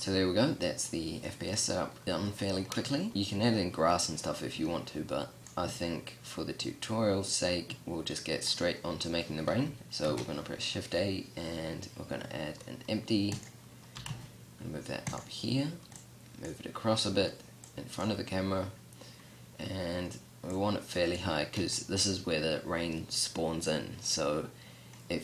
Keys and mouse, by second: 5.4 click, 8.6 middle click, 9.6-10.2 middle drag, 10.2 shift+a, 14.1 g, 16.1-19.9 drag, 21.6-24.9 middle drag.